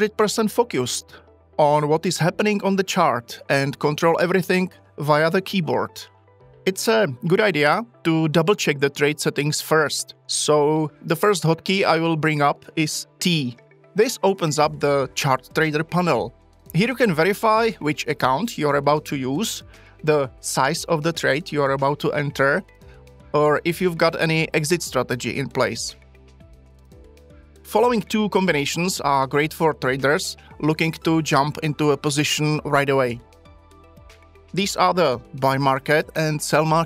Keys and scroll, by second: 13.0 t.